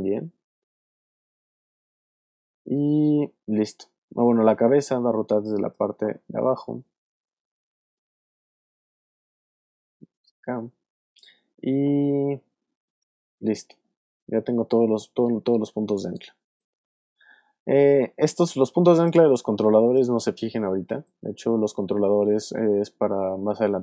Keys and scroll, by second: 3.3 super+Up, 4.4 super+space, 5.2 space, 7.4 y, 13.8 space, 14.6 alt+space, 15.8 alt+space, 16.7 space.